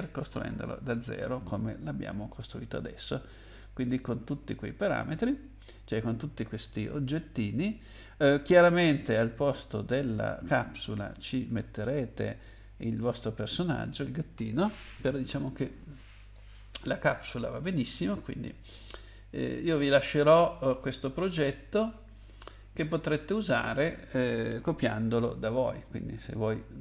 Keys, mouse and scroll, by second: 0.3-0.9 scroll up 5, 0.9-1.5 scroll down 4, 3.6 click, 10.0-11.2 scroll up 2, 12.4 click, 12.9 click, 13.7 click, 16.2 click, 17.0 click, 18.1 click, 18.7 click, 19.7 click, 22.9 click, 23.4 click.